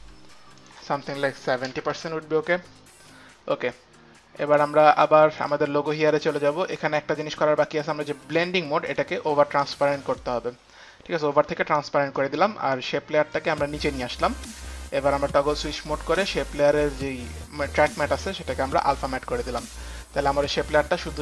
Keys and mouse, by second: 0.6 click, 1.6 KP_7, 2.0 Return, 2.0 KP_0, 5.4 Return, 5.4 KP_0, 5.4 KP_7, 5.4 click, 6.2 click, 8.3 click, 8.9 click, 9.9 click, 12.1 click, 13.4 click, 16.9 click, 17.0 click, 18.9 click, 19.0 click, 20.0 click.